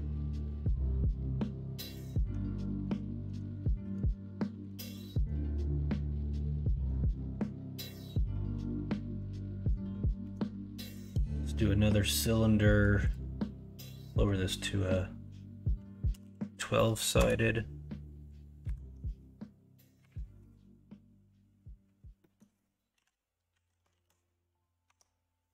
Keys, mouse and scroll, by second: 0.3 KP_1, 0.6 KP_3, 3.6 shift+middle drag, 4.7 alt+z, 5.1-6.8 middle drag, 7.3-8.1 middle drag, 10.2 shift+a, 18.6-22.3 drag, 22.3 middle click, 22.9 KP_1, 22.9 KP_2, 23.5 KP_3, 23.9 alt+z, 24.8 Tab.